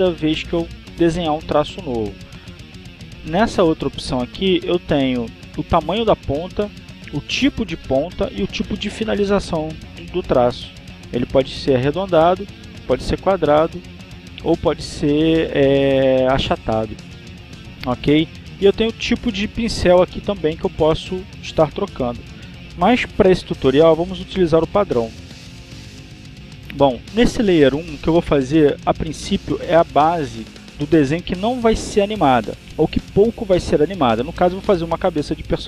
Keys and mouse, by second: 1.6 click, 5.0 click, 13.6 click, 15.5 click, 26.8 click.